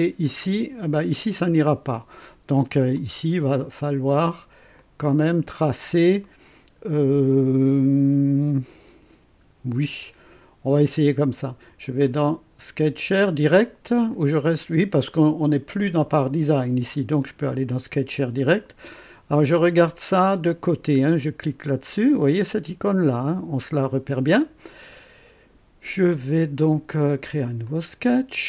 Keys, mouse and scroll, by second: 2.9 click, 4.7 click, 6.0 scroll down 1, 6.2 right click, 9.4 scroll up 1, 11.9 click, 17.1 click, 20.9 click, 27.6 click.